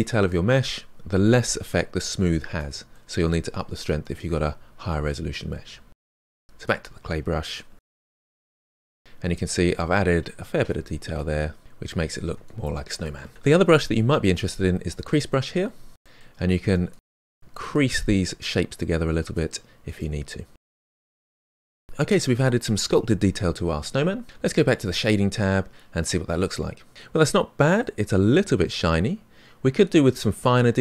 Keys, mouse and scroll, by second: 0.1-1.9 shift+drag, 1.9 middle click, 2.3-3.7 shift+drag, 4.6 middle click, 5.0-6.8 drag, 6.8 f, 7.1 click, 8.0 middle click, 8.2 click, 8.5 middle click, 8.6 shift+click, 9.3 middle click, 9.7 scroll down 2, 9.8 middle click, 10.2-11.8 ctrl+shift+drag, 11.8 middle click, 12.3 shift+click, 12.6-14.6 middle drag, 14.6 click, 14.8-16.0 middle drag, 16.0-16.3 scroll up 2, 16.3 middle click, 16.9 click, 17.7 middle click, 18.3 click, 18.9 middle click, 19.3 click, 19.9 middle click, 20.3 click, 20.5 middle click, 21.3 scroll down 1, 21.5-24.8 middle drag, 24.8 click, 26.0-28.0 middle drag, 28.0-28.6 scroll up 3, 28.6-30.8 middle drag.